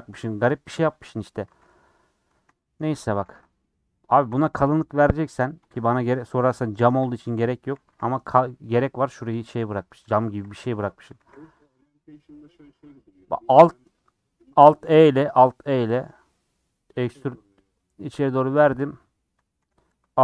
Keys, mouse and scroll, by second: 1.4 ctrl+x, 1.9 click, 2.3 ctrl+x, 3.0 click, 3.2 ctrl+x, 4.0 click, 4.3 ctrl+x, 5.1 click, 5.7 ctrl+x, 6.7 click, 6.8 ctrl+x, 7.0 scroll up 1, 7.1 middle click, 7.6 a, 11.6 alt+e, 19.6 a.